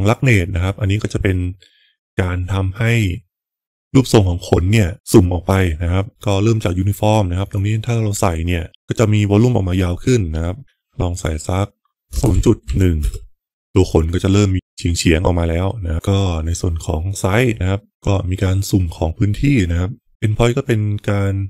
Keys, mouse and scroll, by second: 7.4-13.5 drag, 15.9-17.9 drag.